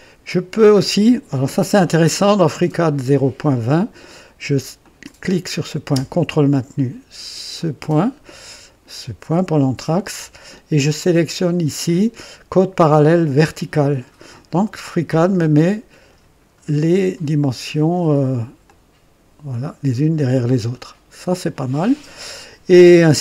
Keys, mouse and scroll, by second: 0.1-0.5 typing, 4.7 click, 7.5 ctrl+click, 9.4 ctrl+click, 11.3 click, 13.6 click, 15.3-16.2 drag, 16.9-17.8 drag, 18.5-19.6 drag, 20.7-21.3 scroll down 3, 22.6 click.